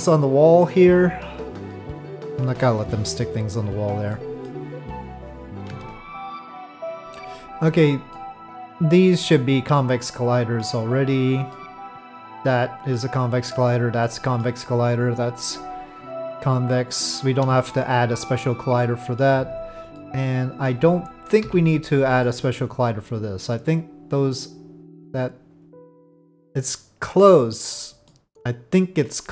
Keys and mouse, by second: 0.9 middle click, 4.1 middle click, 5.6 p, 5.8 Tab, 8.1-9.2 middle drag, 10.0-10.6 middle drag, 11.5-13.0 middle drag, 14.0-14.4 middle drag, 15.0 click, 15.5-17.2 middle drag, 17.6 shift+middle drag, 18.3-19.2 middle drag, 19.4 click, 20.0-20.7 middle drag, 21.4 KP_Divide, 22.2-27.5 middle drag, 28.1-29.3 middle drag.